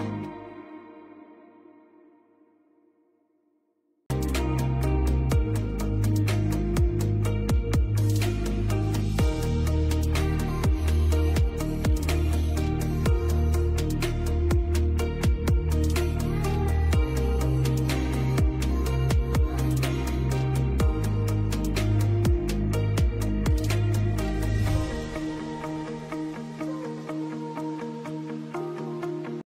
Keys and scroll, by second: 0.6 space, 7.1 c, 7.3 Escape, 13.0 F3, 16.1 Escape, 16.5 F4, 17.2 F2, 20.8 Escape, 22.7 shift+F2.